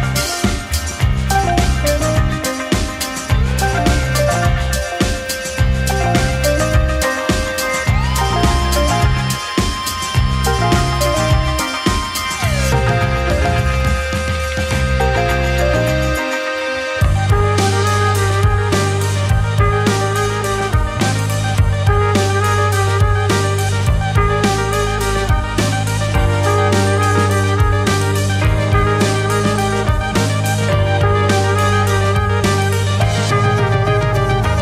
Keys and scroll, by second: 5.6 space, 8.1 ctrl+z, 12.9 2, 16.9 2.